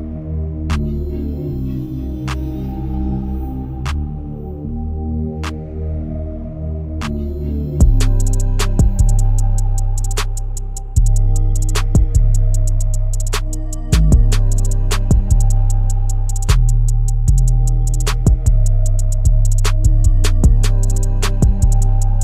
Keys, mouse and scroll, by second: 1.1 KP_1, 2.9-3.8 drag, 3.8-4.4 middle drag, 4.4-5.4 scroll down 7, 5.4 click, 6.0 KP_7, 6.8-7.4 scroll down 3, 7.4 shift+d, 10.3 r, 14.8 g, 17.7 r, 18.9 g, 21.5 t.